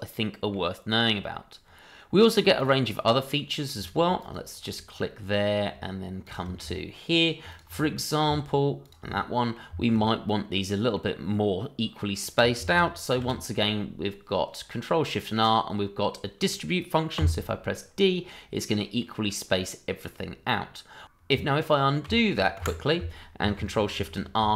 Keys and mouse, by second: 2.5 click, 3.1-3.6 middle drag, 4.2 ctrl+click, 4.9-5.5 middle drag, 6.2 shift+click, 7.5 ctrl+click, 7.8-8.2 middle drag, 8.8 shift+click, 9.1-9.5 middle drag, 9.8 shift+middle click, 10.0-10.3 middle drag, 10.6-10.9 middle drag, 11.9-12.2 middle drag, 13.1 ctrl+shift+r, 17.1 d, 19.0-21.5 middle drag, 23.1 ctrl+z, 23.4 Escape, 24.2 ctrl+shift+r.